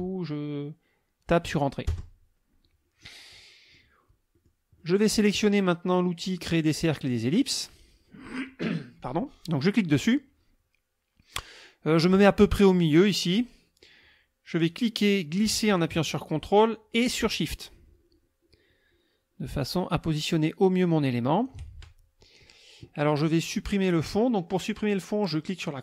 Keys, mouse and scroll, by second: 1.9 Return, 3.0 click, 4.3 click, 4.8 click, 9.6 click, 14.7-21.6 drag.